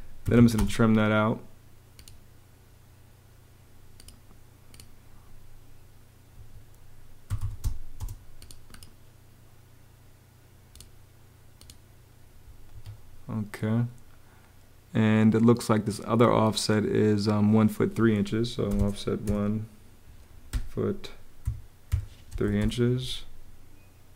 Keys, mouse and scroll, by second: 0.0-0.6 typing, 6.1 ⟲, 7.0 t, 7.7 space, 12.4 ⟲, 18.4 o, 18.5 Home, 18.9 |, 20.2 ', 21.1 -, 21.6 3, 22.1 ', 22.3 Return.